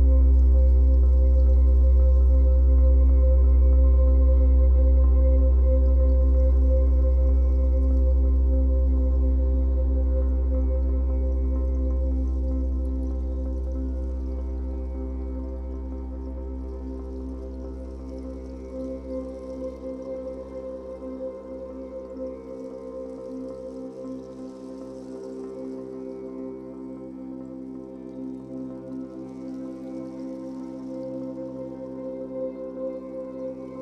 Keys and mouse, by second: 3.1 alt+shift+click, 5.3 click, 7.4 click, 10.2-12.7 drag, 12.9 click, 13.6 click, 14.8 Delete, 15.0 Delete, 16.9-18.7 typing, 20.3-21.4 typing, 25.7 click, 29.6 ctrl+s, 30.8 KP_Divide, 32.4 Tab, 33.0 click.